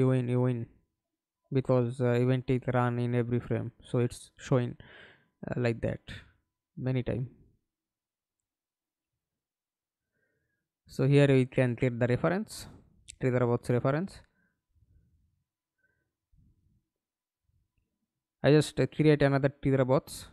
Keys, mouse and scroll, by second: 1.4-2.7 typing, 3.1 Escape, 3.9 middle click, 4.8 F11, 8.2 right click, 9.1 right click, 12.4 Delete, 13.1 right click, 20.2 right click.